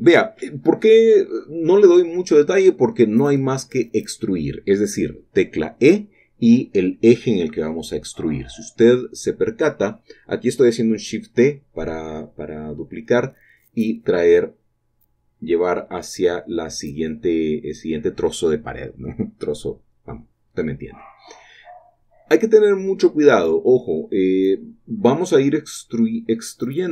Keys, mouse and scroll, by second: 0.5-1.8 shift+middle drag, 2.4 shift+middle click, 2.7-3.9 scroll up 1, 3.9 click, 4.6 shift+click, 11.5-12.4 typing, 20.6 typing, 22.5 shift+click, 26.8 Tab.